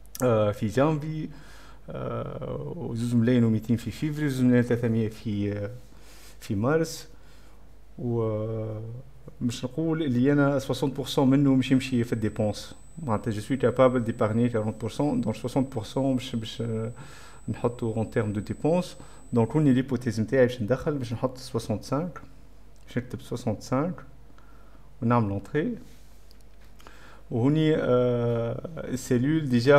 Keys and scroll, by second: 21.7-23.8 typing, 25.3 Return, 25.5 ', 25.6 space.